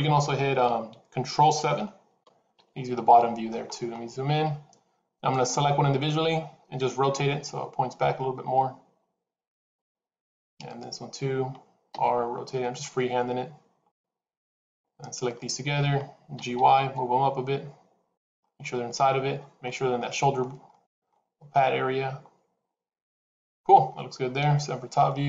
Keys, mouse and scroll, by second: 0.6 KP_1, 1.6 ctrl+KP_7, 3.0 shift+middle click, 3.6-4.6 scroll up 3, 4.6-5.0 scroll up 1, 5.2 click, 7.2 r, 10.6 click, 11.8 r, 15.2 shift+click, 16.2 g, 18.3 middle click, 24.3 KP_7, 25.0-25.2 scroll down 4.